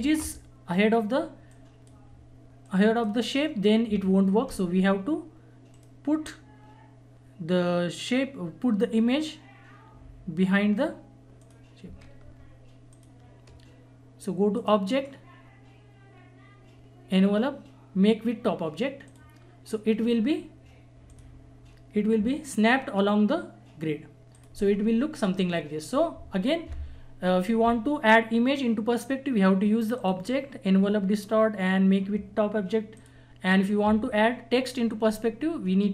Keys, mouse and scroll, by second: 1.5-6.8 drag, 6.8 right click, 11.4 click, 12.9 shift+click, 19.0 click, 24.3 click, 32.2 click, 33.0 click.